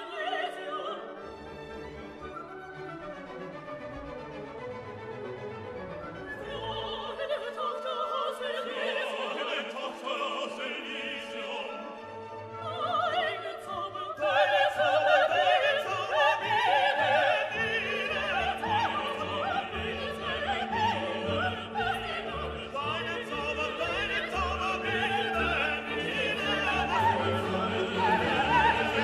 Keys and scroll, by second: 7.8 ctrl+t.